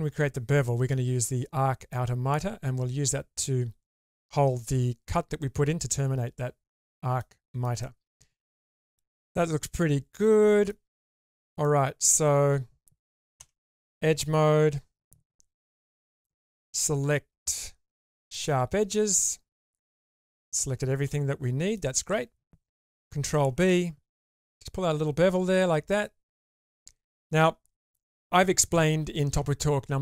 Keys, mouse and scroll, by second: 5.0-7.2 middle drag, 7.4 shift+middle click, 7.8-10.7 middle drag, 11.2 click, 11.6 middle click, 13.4 2, 16.2-18.3 drag, 19.3-21.8 middle drag, 23.3 ctrl+b, 25.9 middle click.